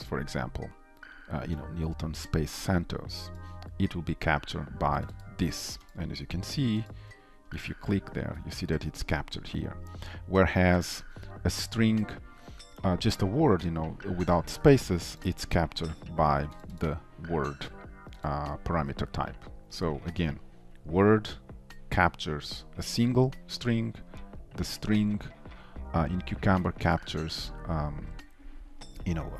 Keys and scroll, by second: 7.8 ctrl+b, 15.4 ctrl+b.